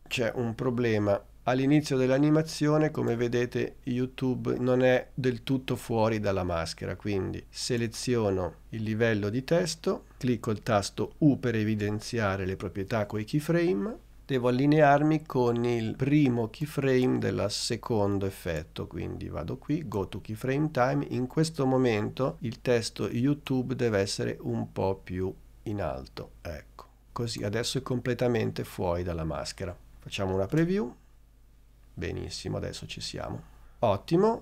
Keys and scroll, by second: 11.4 u, 30.6 space, 33.4 space.